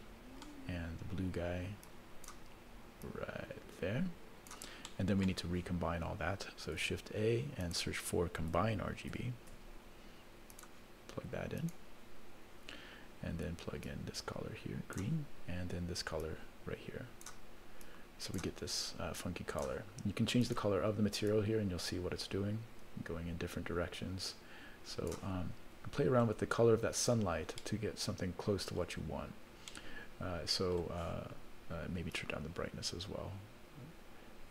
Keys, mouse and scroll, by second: 1.1-1.7 scroll down 1, 1.9 click, 3.0-4.5 drag, 4.9 middle click, 6.8 shift+a, 13.8-15.3 drag, 16.2-17.5 drag, 17.8 click, 19.2 click, 20.4 click, 25.6-26.1 scroll down 1, 26.1 scroll up 1, 26.9 click, 28.0 scroll up 1, 28.8-29.3 scroll down 2, 29.7-30.8 middle drag, 29.7 scroll up 1, 32.1-34.5 drag.